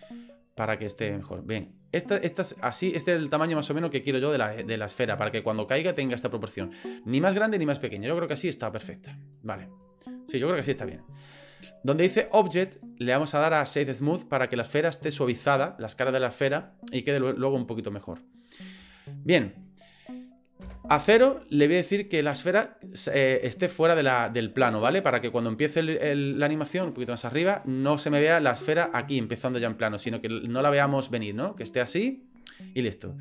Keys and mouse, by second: 2.5-6.0 drag, 8.9-9.3 middle drag, 9.8-10.9 middle drag, 12.7-14.2 drag, 17.2-18.1 middle drag, 19.0-19.4 shift+middle drag, 20.6 KP_0, 22.2 click, 23.5 shift+middle drag, 26.7 click, 28.8 click, 30.4-31.7 drag.